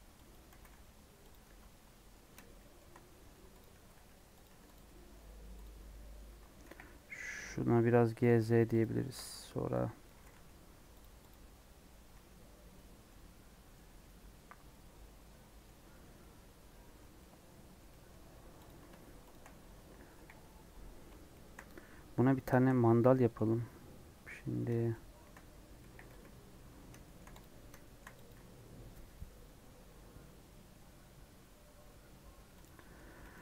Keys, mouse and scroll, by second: 0.5 g, 1.4 Tab, 1.8-3.2 middle drag, 3.2 Tab, 3.5 click, 3.8 g, 4.4 Tab, 4.8 middle click, 5.1 Tab, 5.5 click, 5.8 middle click, 6.5 KP_1, 8.1 KP_3, 8.1 g, 8.9 shift+middle click, 9.1 scroll up 1, 10.0 click, 10.0 g, 11.2 click, 12.0 Tab, 12.1 scroll down 1, 13.0 middle click, 13.7 scroll down 2, 13.9-16.9 middle drag, 16.9 scroll down 1, 17.1-18.6 middle drag, 18.6 click, 19.2 shift+click, 20.1 KP_1, 21.3 shift+middle click, 22.0-24.9 scroll up 5, 24.9 middle click, 25.8 KP_1, 26.1 KP_Decimal, 26.7 scroll up 1, 27.0 shift+middle click, 27.4 click, 27.5 scroll up 3, 27.8 shift+middle click, 28.3 click, 32.6 click, 33.2 Tab.